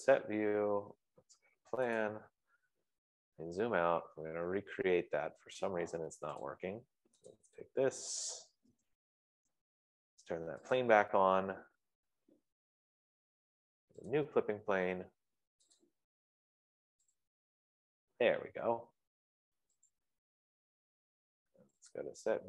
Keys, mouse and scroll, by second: 0.5 F15, 2.6 click, 3.0 middle click, 3.6 middle click, 4.0 middle click, 4.2-5.6 middle click, 6.9 click, 8.1 click, 8.8 d, 9.1 Delete, 11.2 click, 14.6 click, 19.9-22.4 drag.